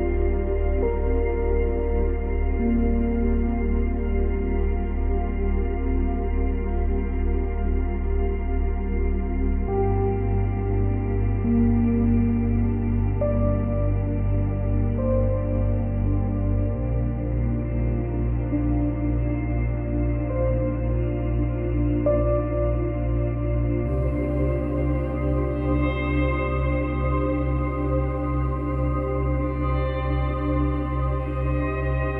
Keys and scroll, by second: 4.1 space, 8.0 space, 8.3 ctrl+z, 10.9 space, 13.1 space, 18.6 Delete, 21.2 space, 26.1 space, 31.9 space.